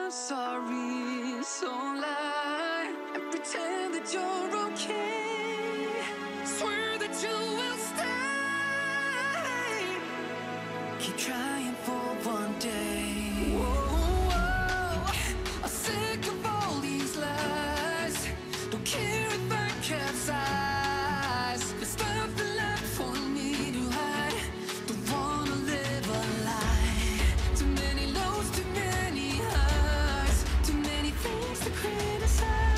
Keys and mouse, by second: 0.4 click, 0.7 middle click, 1.1 middle click, 2.4 click, 2.7 middle click, 3.2 click, 3.6 click, 3.8 middle click, 4.8 click, 5.0 click, 5.4-7.2 middle drag, 8.1 click, 8.4 click, 8.8 middle click, 10.7 click, 11.1 click, 11.3-12.5 middle drag, 12.9 click, 13.3 click, 13.5 click, 14.3 click, 14.6 click, 14.9-15.9 middle drag, 16.7 click, 17.1 click, 17.3 middle click, 17.9 middle click, 20.0 click, 20.8 g, 21.8 click, 22.0 click, 22.4 click, 23.8 g, 24.5 click, 24.7 middle click, 25.3 middle click, 26.2 middle click, 26.7 click, 27.6 middle click, 28.7-30.0 middle drag, 30.7 click, 31.2-31.9 middle drag, 32.2-32.5 middle drag.